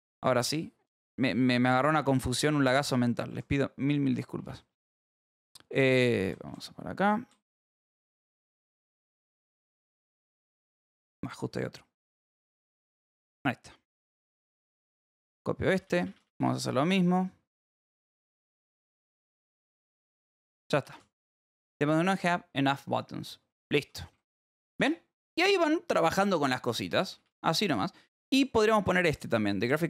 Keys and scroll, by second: 0.1 k, 1.4 j, 2.5 k, 3.2 h, 4.0 k, 4.3 j, 5.5-9.0 typing, 14.0 h, 15.2 y, 15.5 k, 16.9 k, 17.7 v, 19.1 shift+4, 19.4 h, 20.0 p, 21.3 j, 22.9-28.4 typing.